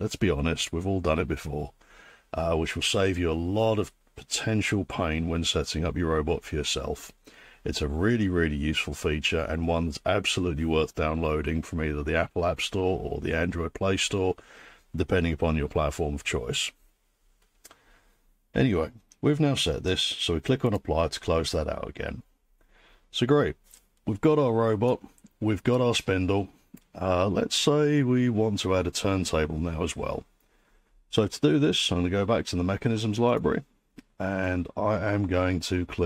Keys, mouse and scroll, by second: 20.7 click, 25.8-26.6 scroll, 26.6 scroll, 33.4 click.